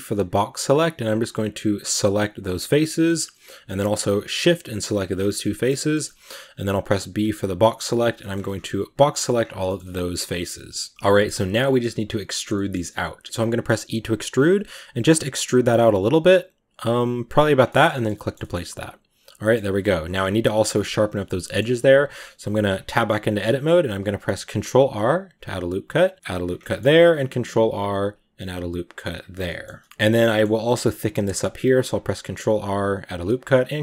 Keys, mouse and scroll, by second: 1.8 b, 2.3-3.3 middle drag, 3.3-3.7 scroll up 2, 4.1 shift+right drag, 4.9 shift+right click, 5.1 scroll down 1, 5.3-7.8 middle drag, 7.8 b, 8.0 shift+middle drag, 8.2-8.5 scroll up 5, 9.0 b, 9.2-9.5 scroll down 5, 9.5-10.2 shift+middle drag, 10.2 scroll down 1, 10.3 middle click, 10.9 scroll up 1, 11.0 middle click, 11.1 scroll down 1, 11.2 shift+middle click, 11.4 scroll up 1, 12.4 middle click, 12.7-13.2 scroll up 1, 13.2 middle click, 13.7 e, 17.4 scroll down 5, 17.5-18.4 shift+middle drag, 18.4-18.9 scroll up 2, 18.9 middle click, 19.4-20.0 scroll up 2, 20.0-20.4 scroll up 1, 20.5 Tab, 21.3 middle click, 22.0 Tab, 22.4 ctrl+r, 23.9 ctrl+r, 26.5 middle click, 27.0 ctrl+r, 29.9 scroll up 1, 30.0 scroll down 1, 30.1-31.2 middle drag, 31.2 ctrl+r, 33.2 ctrl+r.